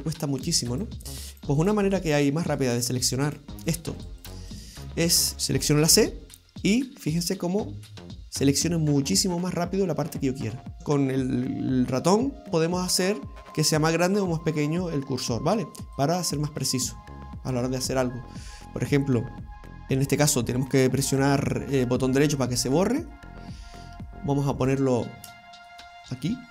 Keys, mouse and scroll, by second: 0.4 right click, 0.8 shift+right click, 1.1 shift+right click, 1.4 shift+right click, 1.6 shift+right click, 1.9 shift+right click, 2.5 right click, 2.8 shift+right click, 3.3 shift+right click, 3.7 shift+right click, 4.0 shift+right click, 4.2 shift+right click, 4.5 shift+right click, 5.3 right click, 5.9 c, 22.7 middle click, 24.1 shift+middle click, 24.7-25.4 scroll down 3, 25.4 shift+middle click, 25.9-26.5 scroll up 6.